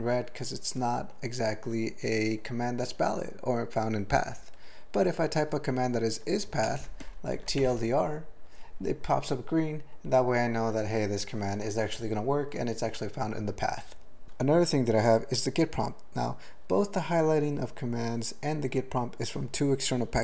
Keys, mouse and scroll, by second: 6.6 alt+BackSpace, 7.3 typing, 14.2 ctrl+/.